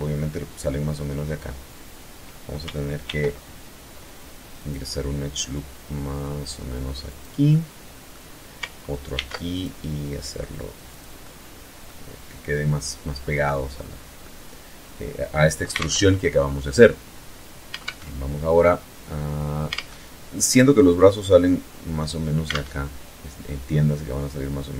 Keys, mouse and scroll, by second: 2.2 ctrl+r, 3.7 click, 6.2 click, 6.6-7.4 middle drag, 8.2 ctrl+r, 8.6 ctrl+click, 10.0 click, 10.3-11.1 middle drag, 11.8-12.3 scroll up 1, 12.3 scroll down 1, 12.8 click, 14.8 alt+Tab, 16.9 alt+Tab, 18.8 alt+Tab, 21.6 alt+Tab.